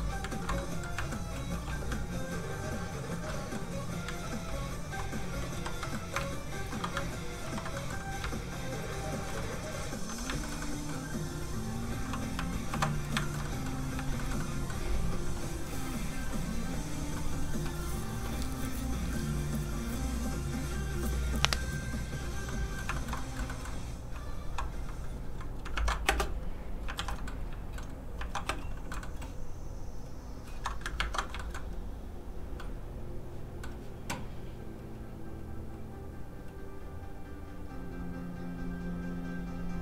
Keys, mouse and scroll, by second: 0.3 ctrl+z, 0.6 middle click, 1.0 shift+middle click, 1.5 middle click, 1.6 f, 1.7 click, 2.2 ctrl+click, 3.3 middle click, 3.4 middle click, 4.1 ctrl+z, 5.6 ctrl+i, 5.9 middle click, 6.3 ctrl+shift+click, 7.4 ctrl+click, 7.5 ctrl+i, 7.8 middle click, 8.3 ctrl+click, 9.4 click, 9.5 middle click, 10.4 shift+middle click, 11.5 click, 11.5 middle click, 12.7 alt+m, 13.0 scroll down 1, 13.2 shift+middle click, 13.4 middle click, 13.5 middle click, 14.2 shift+middle click, 18.7-19.5 scroll up 1, 22.5 middle click, 23.0 shift+middle click, 23.2 middle click, 23.3 shift+middle click, 24.6-25.3 shift+scroll down 1, 25.7 ctrl+Tab, 27.0 alt+shift+z, 27.3 middle click, 27.5 shift+middle click, 28.5 alt+shift+space, 28.9 shift+middle click, 30.0 shift+click, 30.1 click, 31.0 ctrl+shift+Tab, 31.4 shift+middle click, 32.5 scroll down 1, 32.6 middle click, 34.5 click.